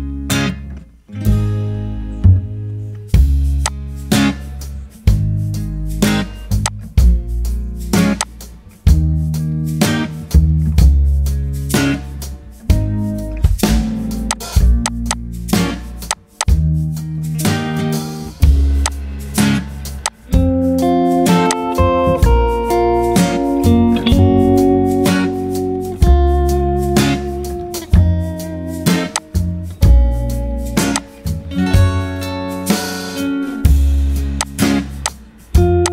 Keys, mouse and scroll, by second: 0.3 Return, 24.0 typing, 24.7 Return.